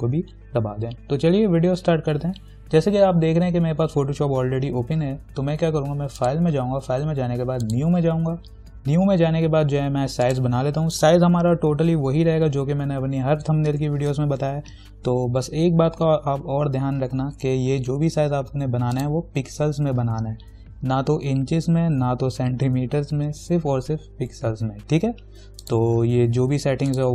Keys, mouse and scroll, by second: 6.4 click, 10.5 click, 19.2 click, 25.8 click.